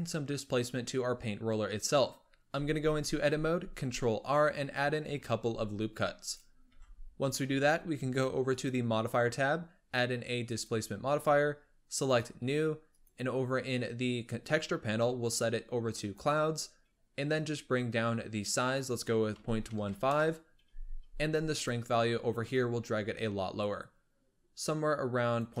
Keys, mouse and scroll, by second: 2.4 Tab, 3.0-3.7 scroll up 4, 3.7 ctrl+r, 6.7 Tab, 8.4-11.5 drag, 12.0-13.2 drag, 15.1-21.5 drag, 22.3-25.6 drag.